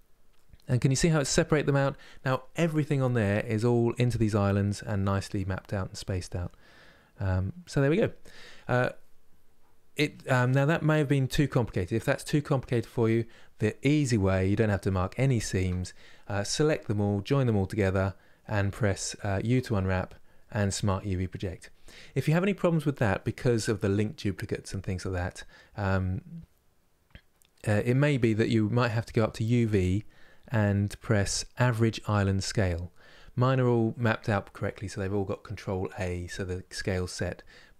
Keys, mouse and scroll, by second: 3.1-13.2 scroll down 1, 13.2-14.1 scroll down 3, 14.1-31.8 middle drag, 31.8-37.7 drag.